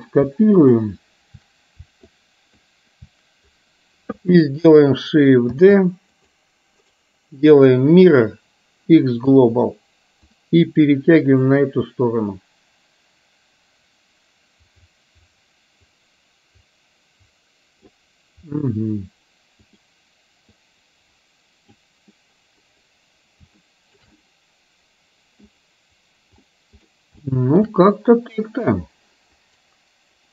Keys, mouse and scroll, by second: 2.3 shift+click, 5.5 shift+d, 7.6-9.4 right drag, 9.4 middle click, 10.4-18.3 drag, 19.6 click, 20.6-21.8 drag, 23.6 shift+middle click, 24.1-25.6 middle drag, 24.1-25.6 scroll up 1, 26.5 middle click, 27.3 shift+middle click, 27.3-27.6 shift+scroll up 1.